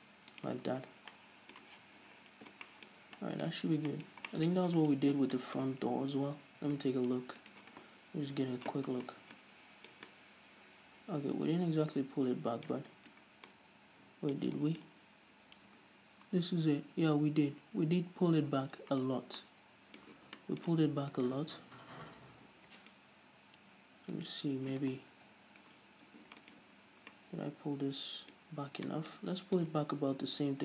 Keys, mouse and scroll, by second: 0.9 shift+click, 1.1-1.6 scroll down 2, 1.6-7.2 middle drag, 2.1 z, 2.5-3.1 scroll down 2, 3.5 Tab, 3.9-4.3 scroll up 2, 5.3-5.8 scroll down 2, 6.6 Tab, 7.2-7.5 right drag, 7.5 Tab, 7.8 right click, 8.7 KP_Decimal, 9.2-9.5 scroll down 2, 9.8 Tab, 9.8-21.6 middle drag, 10.5 Tab, 13.3-13.9 scroll down 2, 15.3-18.9 scroll up 2, 18.9-19.8 scroll down 2, 20.7 Tab, 21.6 right click, 21.9 Tab, 21.9-23.2 middle drag, 23.2 alt+right click, 24.6 right click, 25.6 KP_Decimal, 26.2-26.9 scroll down 2, 26.9 alt+right click, 27.1-27.6 scroll down 2, 27.6-30.4 middle drag, 28.9-29.3 scroll up 2, 30.4-30.6 drag.